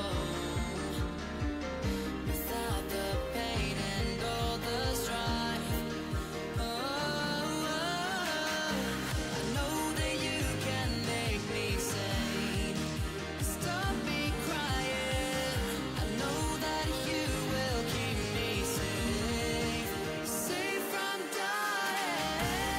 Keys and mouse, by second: 0.7 Tab, 15.4 Tab, 18.4 ctrl+r, 21.2 ctrl+r.